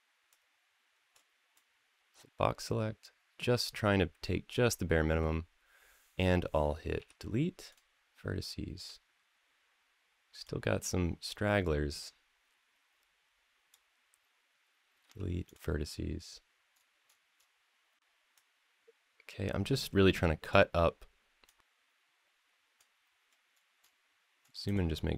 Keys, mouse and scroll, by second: 0.1 click, 1.3-4.3 drag, 6.8 x, 10.2-13.5 drag, 14.8 x, 16.5-17.9 scroll up 4, 18.1 click, 19.8 x, 21.2-22.6 drag, 23.3-23.8 scroll up 2, 24.2-24.5 scroll up 2, 24.4 click, 25.0-25.1 drag.